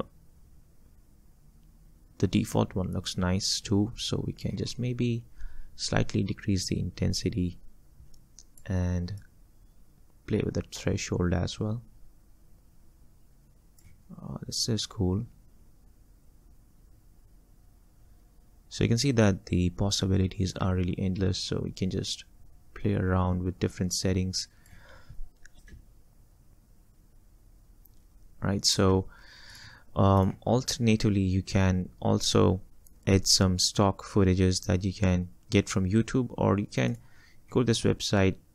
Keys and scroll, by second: 25.8 space, 29.0 space.